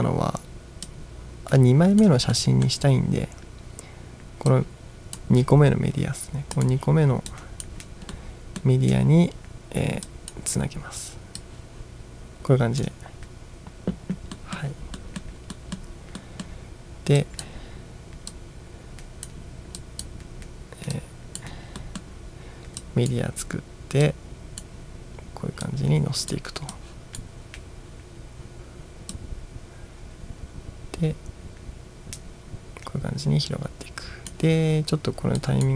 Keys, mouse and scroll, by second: 1.0-2.2 drag, 2.4 middle click, 4.6-5.2 drag, 6.6 click, 7.3 click, 8.2-8.7 middle drag, 10.1 drag, 11.5-12.9 drag, 14.4-14.8 middle drag, 15.0 middle click, 15.6 middle drag, 16.3 middle drag, 17.3 drag, 18.4-19.3 drag, 19.9 click, 21.0-21.5 drag, 21.9 middle click, 22.9-23.2 drag, 24.1-24.7 drag, 25.7-26.3 drag, 26.8 click, 29.2-34.4 drag, 35.4 click.